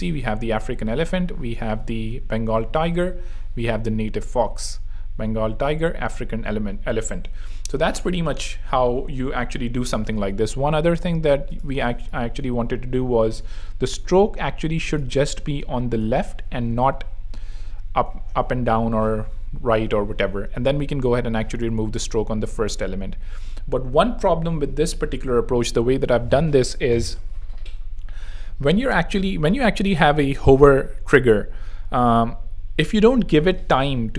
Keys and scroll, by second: 10.1 super+2, 12.4 shift+e, 16.6 super+3, 17.3 super+r, 20.5 super+2, 22.7 super+3, 23.9 r.